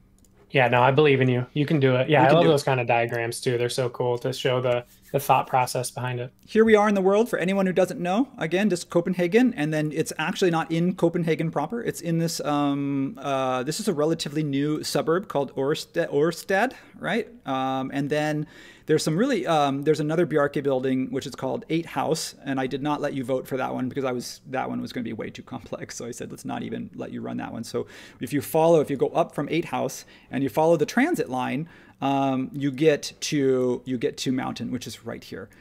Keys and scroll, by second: 0.5 super+w.